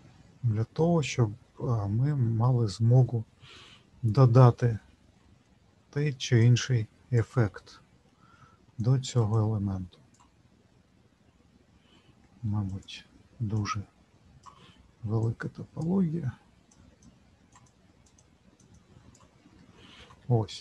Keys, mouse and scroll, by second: 5.4 middle click, 6.4 click, 7.5 middle click, 8.7 shift+click, 9.3 shift+click, 12.6 click, 15.2 click, 17.0 shift+click, 17.6 shift+click, 18.2 shift+click, 20.4-20.6 scroll down 2.